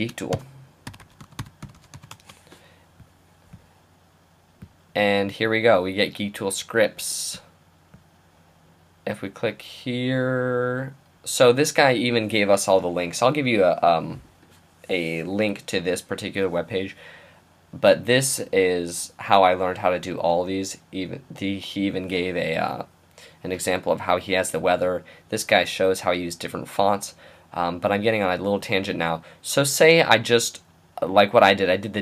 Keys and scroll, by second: 0.0-2.6 typing.